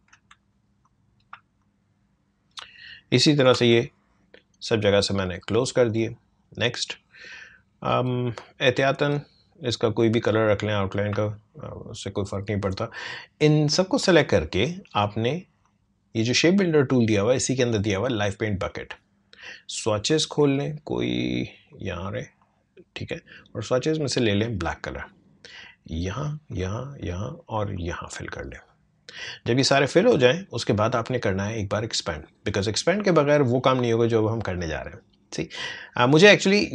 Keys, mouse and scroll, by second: 0.4 space, 0.8 click, 0.9 space, 1.6-3.4 drag, 3.4 ctrl+j, 4.9-7.9 drag, 10.4 space, 10.7 click, 10.9 space, 13.7-21.1 drag, 21.7-32.6 drag.